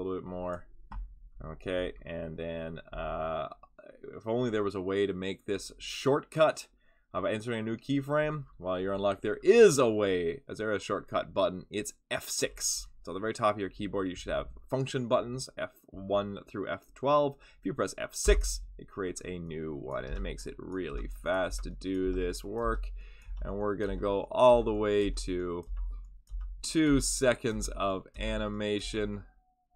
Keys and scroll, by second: 18.2 F6, 20.0 F6, 20.9 F6, 21.4 F6, 22.0 F6, 22.6 F6, 23.2 F6, 23.8 F6, 24.5 F6, 25.0 F6, 25.6 F6, 26.2 F6, 26.8 F6, 27.5 F6, 28.1 F6, 28.8 F6.